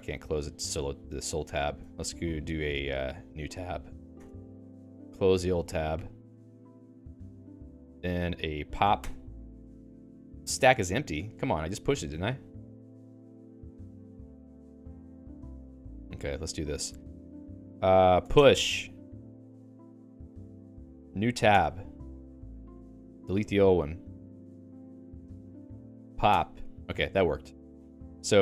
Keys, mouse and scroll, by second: 4.1 Return, 7.0 click, 7.8 alt+x, 8.4 ctrl+j, 8.8 ctrl+j, 9.2 Return, 21.5 Return, 24.2 click, 25.1 click, 25.3 alt+x, 25.8 ctrl+j, 26.1 ctrl+j.